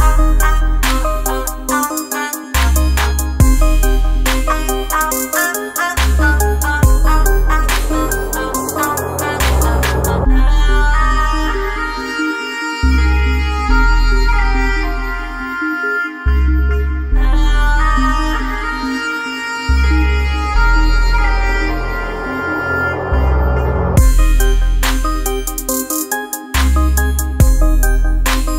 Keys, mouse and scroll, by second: 0.5 ctrl+Return, 4.3 click, 6.2 alt+scroll down 1, 6.5 space, 10.4 ctrl+space, 10.9 ctrl+space, 12.2 click, 12.7 space, 13.3-19.2 drag, 19.2 F7, 20.7 shift+click, 23.4-28.5 drag.